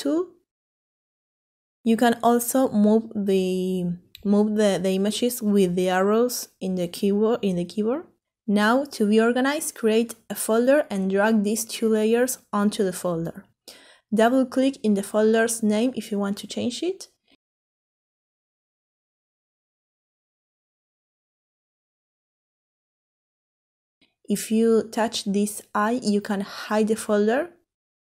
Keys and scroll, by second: 4.5 Up, 5.0 Up, 5.1 Up, 15.9-17.5 typing, 19.4-20.5 typing.